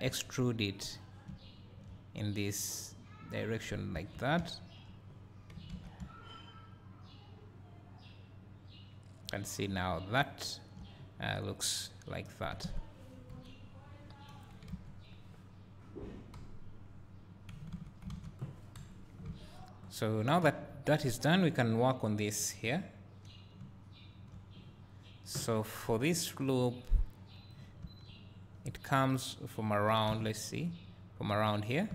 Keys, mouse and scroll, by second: 0.3 e, 1.3 `, 2.9-13.4 drag, 4.1 Tab, 5.1-6.0 scroll down 2, 8.4 `, 9.4-9.8 middle drag, 13.3 KP_1, 16.3 KP_Divide, 18.1 alt+a, 18.8 KP_1, 20.1-21.2 drag, 24.6 `, 27.0 click, 28.0 Tab, 28.8 1, 31.4 click.